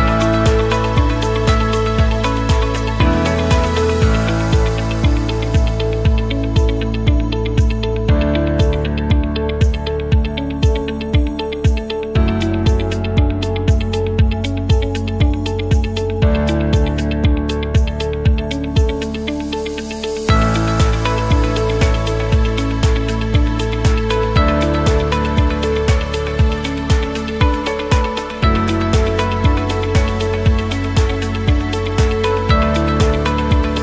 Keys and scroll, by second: 27.0 space, 31.0 c, 32.2-33.2 typing.